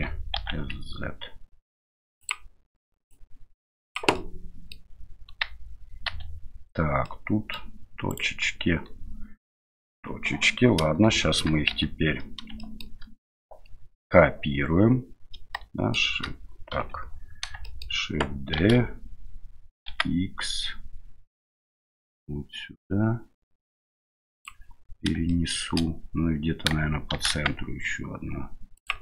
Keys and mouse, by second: 0.3 s, 3.1 click, 4.3 middle click, 6.1 1, 7.0 middle click, 8.1 right click, 9.9 KP_7, 11.2 shift+middle click, 11.7 Tab, 12.6 shift+middle drag, 15.5-15.9 shift+middle drag, 16.7 KP_7, 17.6 middle click, 18.6 shift+d, 25.3-25.6 shift+middle drag, 27.1 shift+d.